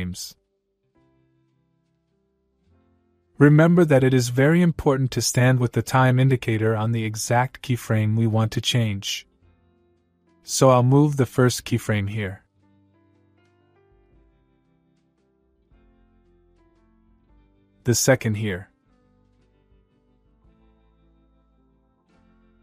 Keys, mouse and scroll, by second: 1.1 u, 3.0 scroll up 1, 3.3-4.3 middle click, 4.9-5.9 click, 6.2-6.8 middle click, 9.3 click, 9.9 shift+Left, 11.7 shift+Right, 13.0-14.9 click, 15.0-15.7 middle click, 18.0 shift+Left, 19.0 shift+Right, 19.4 shift+Left, 20.7-21.6 click, 21.9-22.6 middle click.